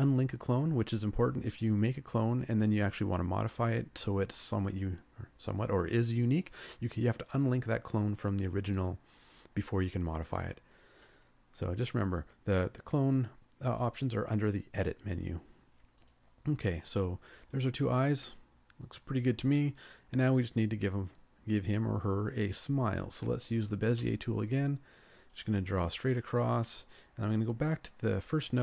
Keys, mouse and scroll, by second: 24.0 b.